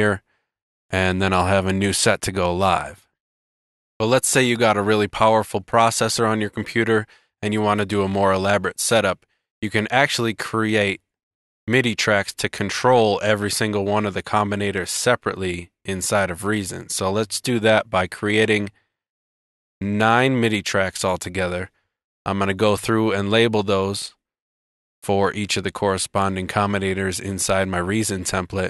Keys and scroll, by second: 1.0 super+z, 2.7 super+z, 14.5 shift+super+t, 16.7 shift+super+t, 27.5 super+r.